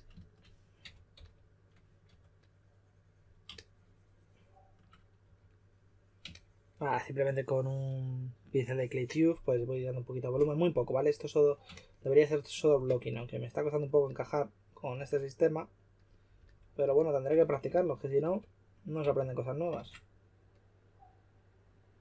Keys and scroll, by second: 0.8-2.0 typing, 5.2 3, 17.3-19.0 typing.